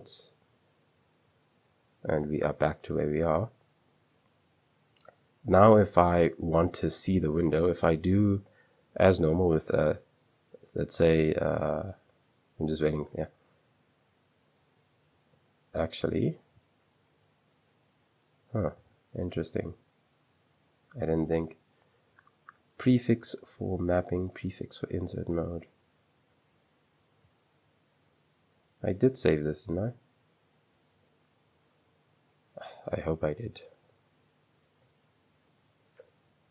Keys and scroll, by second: 0.0-3.3 typing, 1.3 Return, 9.7 j, 13.6 typing, 15.5 Escape, 16.2 super+2, 16.8-18.6 typing, 20.9-21.6 typing, 26.1 super+3, 28.2 super+2, 28.9-29.2 typing, 29.4 Return, 30.4 super+2, 30.5-32.4 typing, 33.8 Return, 34.9-36.5 typing, 36.0 Return.